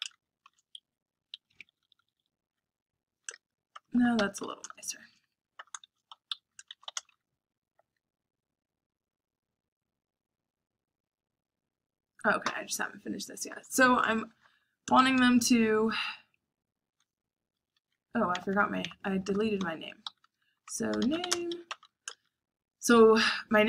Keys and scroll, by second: 0.0-2.1 typing, 3.2-8.4 typing, 6.3 Escape, 11.7 j, 13.5-15.5 typing, 17.5 Escape, 17.6-22.1 typing, 20.0 Escape.